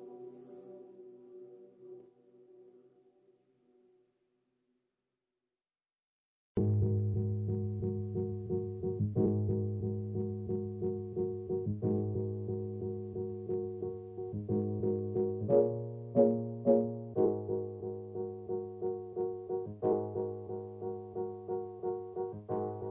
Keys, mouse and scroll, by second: 0.9 scroll up 1, 1.1 KP_0, 1.9 scroll down 1, 2.4 scroll down 1, 3.1 click, 4.3 KP_0, 4.9 n, 9.5 click, 9.8 n, 10.1 scroll up 1, 10.4-15.3 shift+middle drag, 11.9-13.2 scroll down 2, 13.2-15.3 scroll down 1, 15.3-22.0 drag, 21.6-22.0 scroll up 2, 22.0-22.9 shift+middle drag.